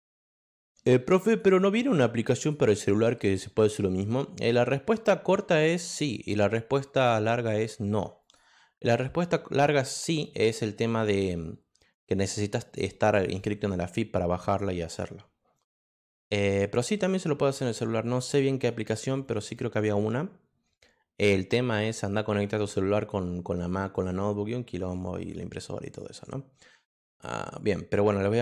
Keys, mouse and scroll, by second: 1.2 click, 2.3 click, 8.2 click, 13.3-14.5 drag, 14.9 click, 15.5 click, 19.2 click, 19.7 click, 25.1 click.